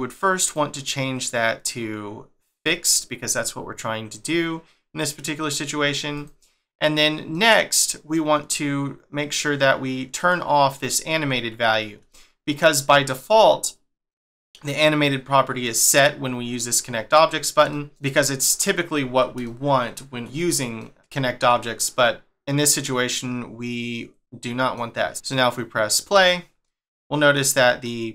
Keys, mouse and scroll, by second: 0.4 click, 3.4 middle click, 6.1 click, 7.3 middle click, 10.1 click, 12.1 shift+middle click, 17.7 shift+middle click, 19.4 shift+middle click, 22.8 middle click, 25.0 click, 25.9 click, 26.6 middle click, 27.8 middle click.